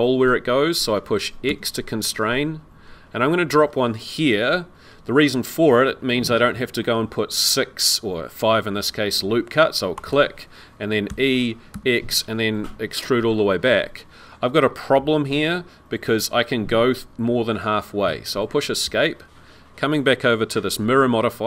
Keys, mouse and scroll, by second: 11.1 e.